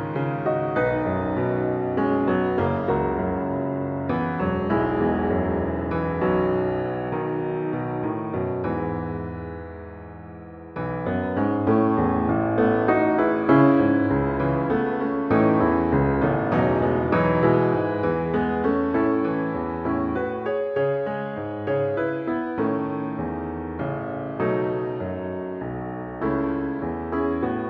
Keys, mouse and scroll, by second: 3.6 F2, 10.9 p, 13.9 shift+s, 15.0 shift+r, 19.3 alt+click, 23.2-25.2 typing, 26.4-27.5 typing.